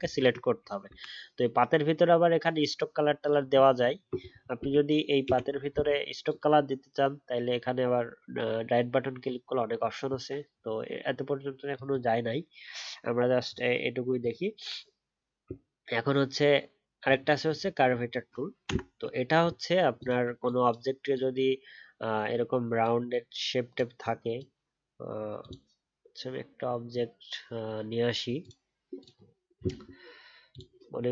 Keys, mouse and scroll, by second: 18.0-20.2 alt+scroll down 1.